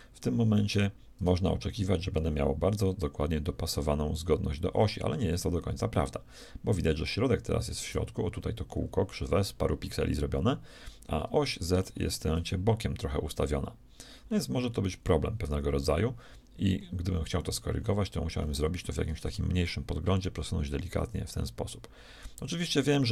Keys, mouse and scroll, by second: 0.6 g, 11.2-15.2 middle drag, 16.7-17.0 scroll up 1, 19.0 g.